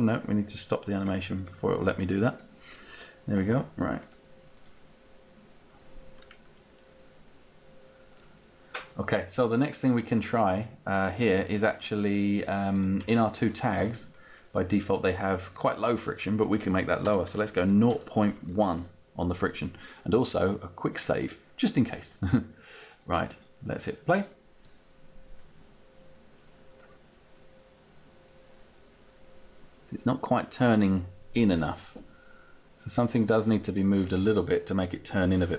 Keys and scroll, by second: 17.0 0, 17.4 ., 18.0 1, 18.8 1.